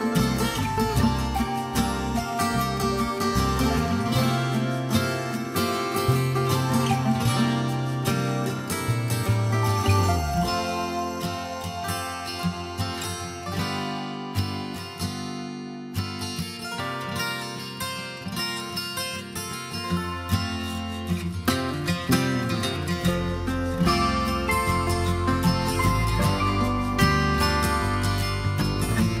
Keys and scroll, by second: 26.6 Return.